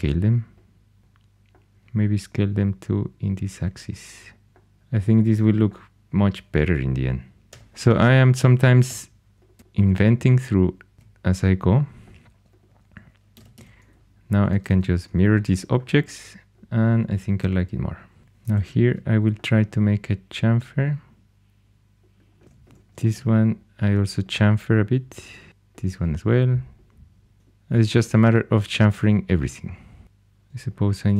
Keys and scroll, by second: 1.7 s, 7.5 4, 8.8 x, 10.9 alt+x, 13.3 alt+x, 13.5 alt+x, 14.4 alt+x, 14.6 alt+x, 18.2 2, 22.4 2, 27.3 shift+super+e, 30.0 2.